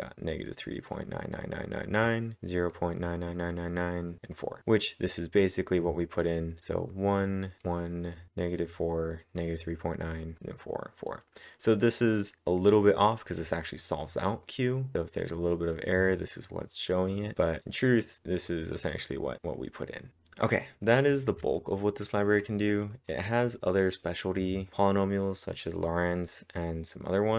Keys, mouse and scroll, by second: 2.7-4.3 drag, 4.3 click, 4.6-5.9 drag, 5.9 scroll up 2, 11.5-12.2 scroll down 1, 12.2-12.6 scroll down 2, 12.6 click, 16.5 scroll down 1, 16.8 click, 19.4 click, 19.4-20.1 scroll up 1.